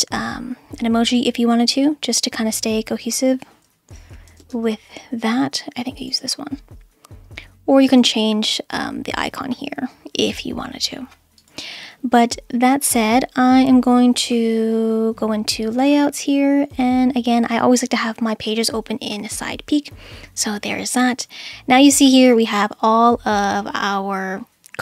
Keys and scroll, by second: 3.9-4.9 typing, 7.2 space.